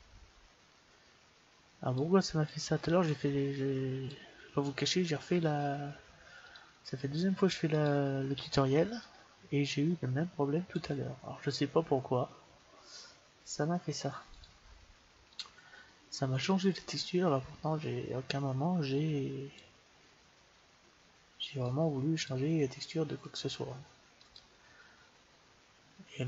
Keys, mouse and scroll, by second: 2.4-4.2 drag, 6.3 click, 14.2-15.8 drag, 16.9-18.1 drag, 21.5-23.3 drag, 24.0-26.0 drag.